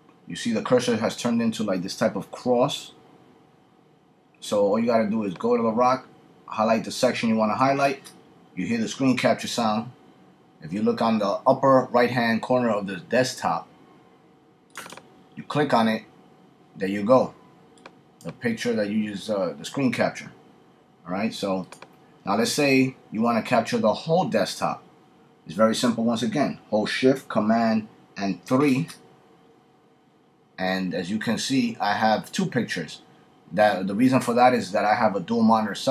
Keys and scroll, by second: 28.4 shift+super+3.